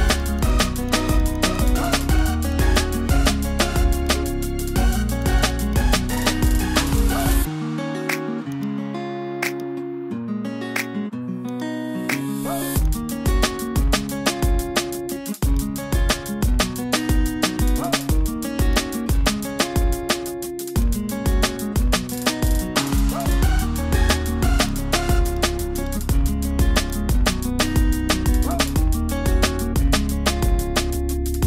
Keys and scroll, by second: 6.8 super+0.